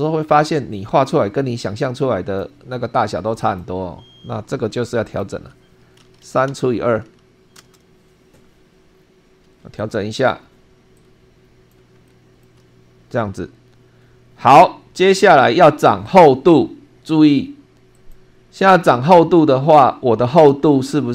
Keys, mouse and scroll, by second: 0.5-2.5 drag, 3.4 click, 5.1 click, 6.0 3, 6.5 /, 7.0 2, 7.5 Return, 8.9 scroll up 2, 9.7-10.5 drag, 10.9-11.9 drag, 12.1 shift+middle click, 16.1 click, 17.9 click, 19.1 scroll up 2, 19.7-20.5 shift+middle drag, 20.7 shift+scroll up 2.